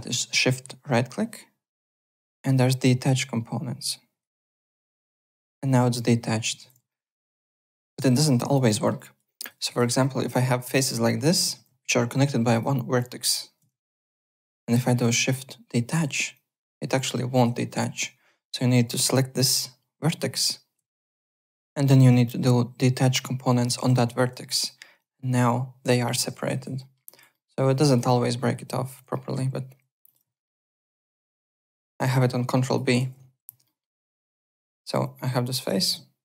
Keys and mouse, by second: 5.2 click, 6.6 ctrl+z, 6.9 alt+middle click, 8.7 alt+middle click, 9.0 alt+click, 9.4 click, 9.7 alt+middle click, 10.3 click, 11.5 ctrl+z, 12.5 click, 13.7 ctrl+z, 14.7 shift+right click, 16.3 click, 17.5 ctrl+z, 18.4 1, 19.3 click, 20.9 shift+right click, 23.9-24.8 typing, 24.6 click, 26.2 ctrl+z, 26.4 alt+right click, 26.8 alt+middle click, 27.0 alt+click, 27.3 alt+middle click, 27.5 alt+right click, 27.8 alt+click, 29.1 alt+middle click, 30.0 click, 30.3 alt+middle click, 30.5 alt+click, 31.1 ctrl+b, 32.2 click, 33.0 ctrl+z, 33.6 alt+middle click, 34.0 alt+click, 35.0 click, 35.8 ctrl+z.